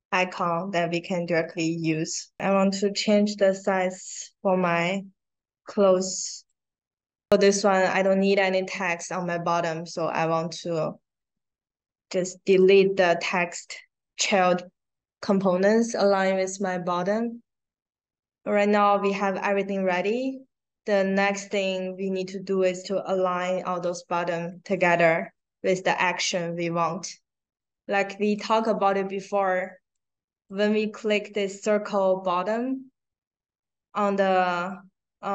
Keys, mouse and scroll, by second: 0.3 click, 1.3 click, 5.8 click, 10.1 click, 12.4 click, 28.2 click, 29.9 click.